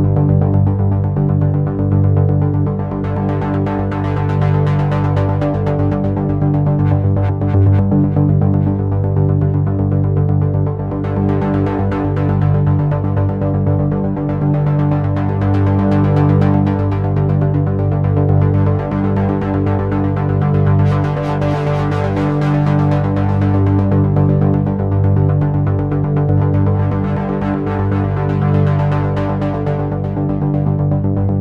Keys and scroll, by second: 6.1 ctrl+z.